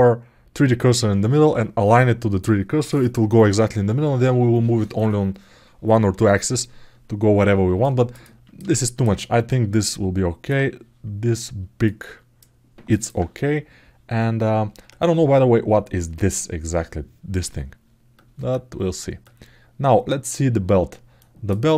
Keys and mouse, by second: 7.6 alt+middle click, 8.0 ctrl+alt+middle click, 8.5 alt+shift+middle click, 9.0-10.2 ctrl+alt+middle drag, 11.6 ctrl+alt+middle click, 12.7 alt+middle click, 21.0 alt+click, 21.5 alt+middle click.